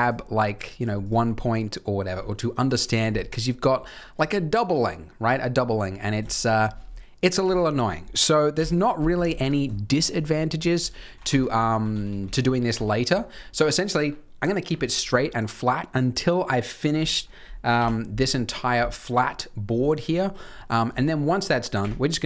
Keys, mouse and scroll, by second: 0.4 click, 0.7 click, 1.0 click, 3.8 click, 5.9 scroll down 3, 6.3 shift+middle click, 6.6 scroll down 2, 8.5 KP_1, 9.3-9.9 scroll down 3, 9.7 shift+middle click, 10.3 ctrl+z, 10.5 ctrl+z, 10.7 ctrl+z, 11.0 ctrl+z, 11.2 Tab, 11.6 ctrl+z, 11.8 ctrl+z, 12.0 ctrl+z, 12.2 ctrl+z, 12.3 ctrl+z, 12.7 ctrl+z, 13.2-13.6 scroll up 1, 13.6 scroll down 1, 13.6 scroll down 1, 17.7 KP_3, 19.8 shift+middle click, 20.5 shift+middle click, 21.7 KP_1.